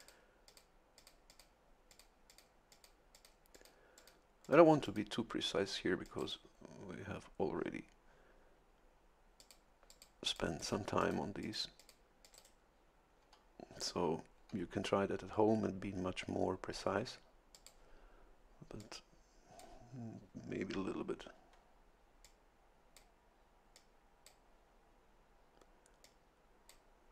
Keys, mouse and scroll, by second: 0.5 click, 1.0 click, 1.9 click, 2.3 click, 2.7 click, 3.1 click, 3.5 click, 4.0 click, 4.4 click, 4.8 click, 6.0 click, 6.2 right click, 9.4 click, 9.9 click, 10.3 click, 11.0 click, 11.4 click, 12.2 click, 12.3 right click, 17.5 click, 18.8-19.8 drag, 22.2 click, 23.7 click, 26.0 click.